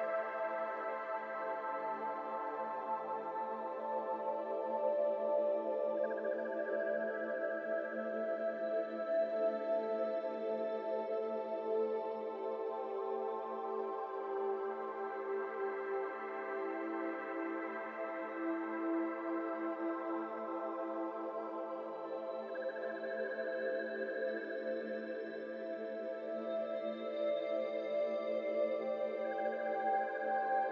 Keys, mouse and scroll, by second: 0.2 shift+middle click, 0.4 scroll up 1, 0.6 g, 1.2 g, 2.2 alt+z, 2.3 middle click, 3.2 scroll down 1, 3.2 middle click, 3.5 g, 7.0 middle click, 7.5 scroll up 2, 7.6 middle click, 7.9 Tab, 8.0-8.8 scroll down 3, 8.1 middle drag, 8.8 click, 9.1-9.5 middle drag, 9.5-9.9 scroll down 5, 9.9-10.5 middle drag, 10.5 click, 10.8-12.0 shift+middle drag, 12.0 shift+d, 12.5 click, 13.0 Tab, 13.3 click, 13.5 3, 13.6 click, 14.1 shift+s, 14.5 middle click, 15.0 Tab, 15.5 click, 16.1 shift+s, 16.7-17.5 shift+middle drag, 17.5 Tab, 17.8 a, 18.0 shift+middle click, 18.7 KP_7, 19.2 r, 21.8 r, 24.3 r, 24.9 r, 28.0 shift+middle click, 28.2-28.6 scroll up 2, 28.6 g, 29.7 g, 29.8 s.